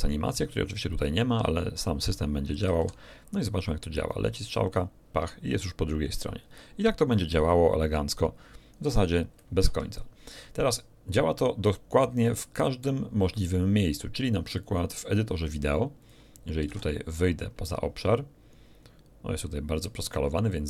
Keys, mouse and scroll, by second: 2.6 alt+a, 7.2 click, 9.6 Escape, 12.1 click, 14.5 click, 15.9 click, 16.7 alt+a.